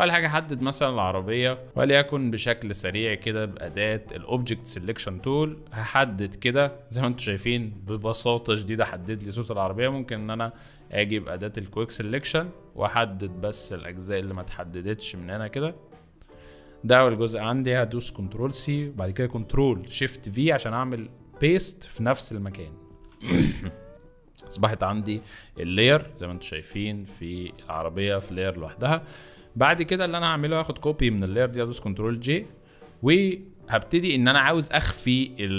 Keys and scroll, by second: 1.6 space, 18.3 ctrl+c, 22.8 ctrl+shift+v, 25.7 v, 27.3 ctrl+z, 31.3 ctrl+j.